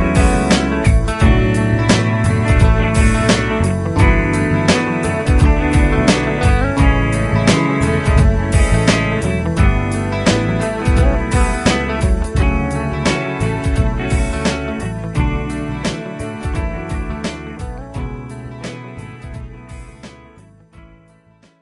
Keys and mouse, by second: 0.0 space, 2.6-3.0 typing, 6.4-7.1 typing, 8.5-9.5 typing, 10.6 typing, 12.1-13.0 typing.